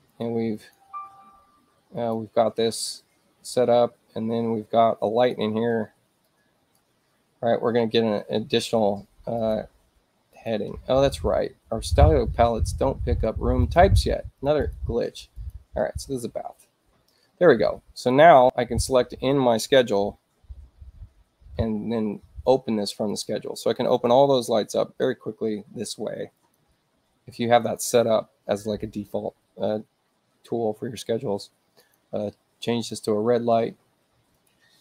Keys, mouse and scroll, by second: 0.1 click, 0.5 click, 1.9 click, 3.5 space, 5.2 click, 5.7 ctrl+alt+c, 6.2 click, 9.4 click, 10.3 click, 13.6 click, 14.4 click, 14.6 click, 15.3 click, 15.8 Return, 18.0 click, 23.2 click, 26.4 click, 27.7 click, 31.9 click, 33.0 click, 34.4 click.